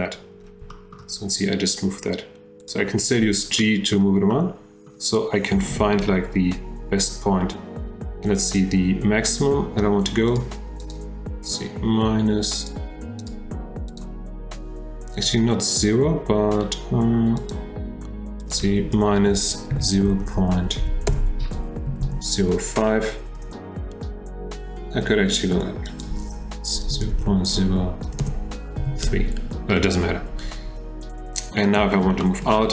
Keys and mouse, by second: 0.7 shift+middle drag, 2.6 click, 3.6 middle click, 4.3-4.9 middle drag, 9.4 middle click, 10.3 middle click, 10.4 click, 10.9 click, 12.6 click, 13.2 click, 13.9 click, 17.4 click, 18.4-23.8 drag, 25.9-29.4 drag, 28.2 BackSpace, 32.2 shift+drag.